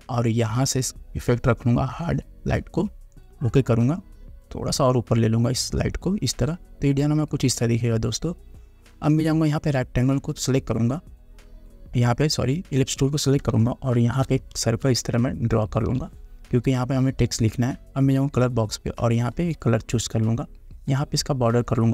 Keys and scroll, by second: 13.7 space.